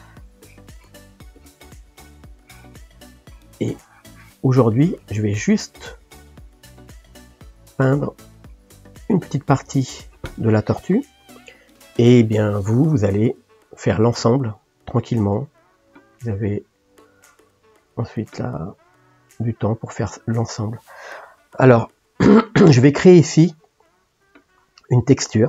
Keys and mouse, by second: 0.4-1.7 drag, 1.7 middle click, 2.4-5.6 drag, 5.6 middle click, 6.3 click, 7.0-25.4 ctrl+middle drag.